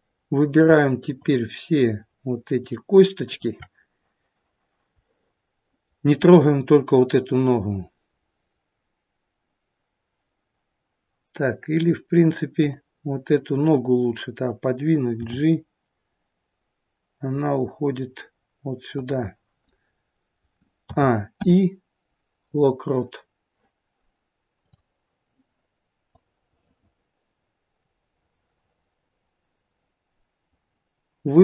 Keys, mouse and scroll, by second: 1.1 shift+click, 5.1 middle click, 6.3-8.1 scroll down 1, 8.1-9.1 scroll down 1, 12.6 click, 15.2 g, 20.9 a, 21.4 i, 24.6 click, 26.1 click.